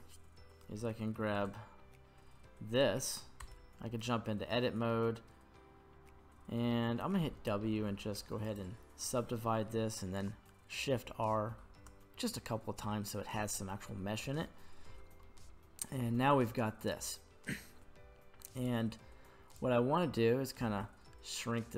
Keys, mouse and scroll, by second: 1.4 right click, 2.1-3.5 scroll down 1, 3.5 Tab, 8.6 w, 10.9 shift+r, 11.5 shift+r, 14.2 Tab, 15.2 middle click, 16.1-17.0 middle drag, 18.6 right click, 19.5-20.7 right drag, 20.7 5.